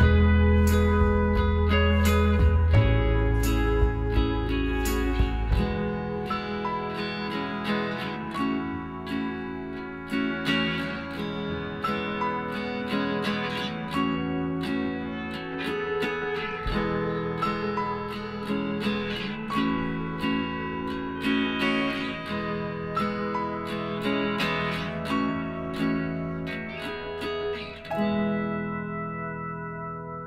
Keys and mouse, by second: 0.3-3.7 right drag, 0.7-2.3 drag, 2.3 l, 3.5 p, 4.7-8.2 right drag, 5.0 Tab, 6.0 Tab, 9.1 s, 11.0-12.7 middle drag, 12.7 l, 13.6 s, 15.4 middle click, 17.6 KP_1, 19.0 KP_9, 20.3 KP_1, 21.2 KP_3, 22.3 KP_9, 23.2-25.5 middle drag, 25.5 ctrl+r.